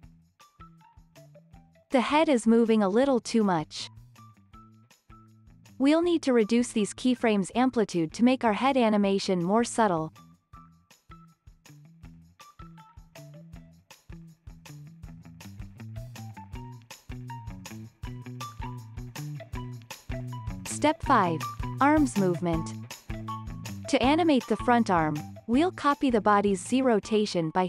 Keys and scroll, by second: 1.3 space, 5.4 space, 8.1 x, 13.9 space, 20.1 space, 20.5 super+s.